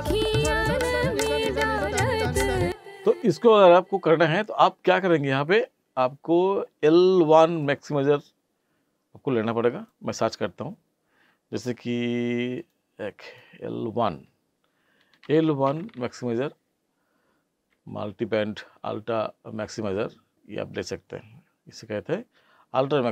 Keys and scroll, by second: 2.6 space.